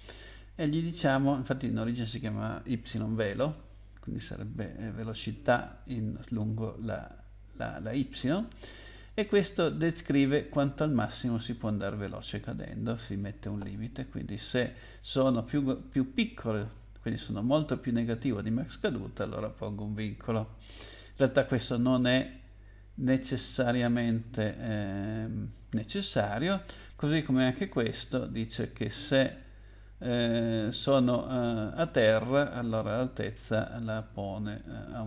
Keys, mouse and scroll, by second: 1.6 click, 1.8 click, 1.9 double click, 9.1 click, 9.3 click, 9.4 double click, 10.0 double click, 10.2 double click, 10.3 double click, 11.2 double click, 11.3 double click, 11.4 double click, 11.5 double click, 12.2 double click, 12.4 double click, 12.5 double click, 15.5 click, 15.7 click, 15.9 double click, 17.2 double click.